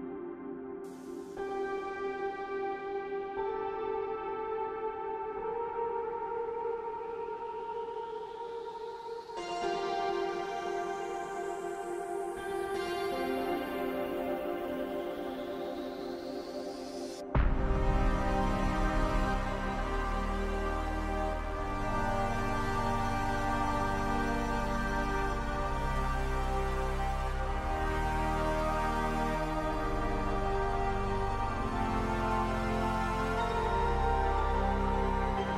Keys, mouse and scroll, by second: 1.7 double click, 2.3 2, 2.4 Return, 4.5 double click, 4.7-5.7 typing, 7.2 right click, 11.2 double click, 11.4-12.3 typing, 15.2 right click, 15.9 double click, 16.0-16.9 typing, 20.8-21.3 scroll up 3, 21.3 middle click, 22.9 scroll down 1, 23.1 middle click, 25.9 double click, 26.2 shift+click, 30.4 ctrl+v, 31.4 BackSpace, 31.6 Home, 31.7 Delete, 32.1 Return.